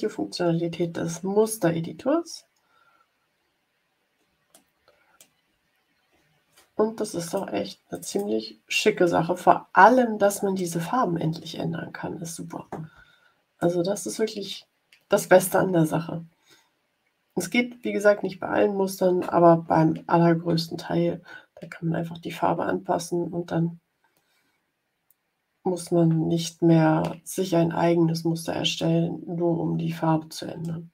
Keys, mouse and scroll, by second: 1.5 ctrl+scroll down 2, 2.4-3.5 ctrl+scroll down 6, 4.5 middle click, 5.6 ctrl+scroll up 2, 7.2 click, 7.8 click, 8.9-10.7 middle drag, 11.9 ctrl+scroll up 2, 13.5-14.6 middle drag, 28.7-30.1 middle drag, 30.1 click.